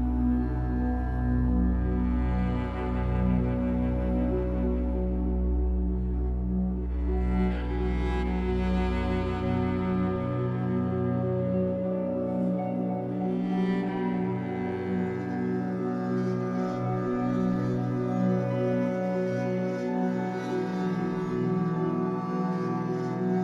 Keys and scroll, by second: 1.7 Escape, 4.0 Escape, 4.7 w, 9.4 Escape, 9.7 3, 10.6 shift+Tab, 11.1 Escape, 12.9 w, 18.6 Escape, 20.7 b, 23.3 b.